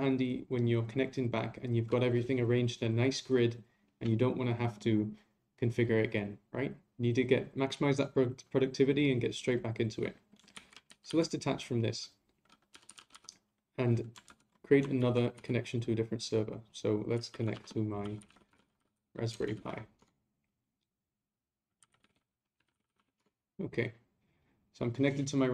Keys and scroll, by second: 10.5 ctrl+a, 14.2 ctrl+u, 15.0 ctrl+a.